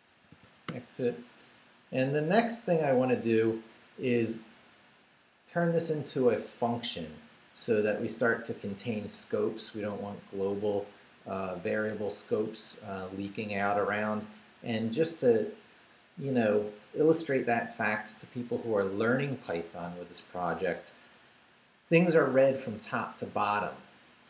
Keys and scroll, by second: 0.0-0.9 typing.